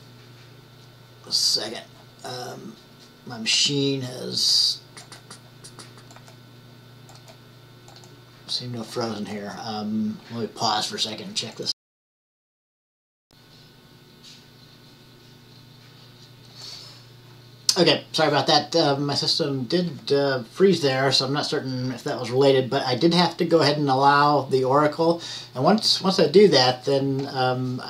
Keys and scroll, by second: 13.2 typing.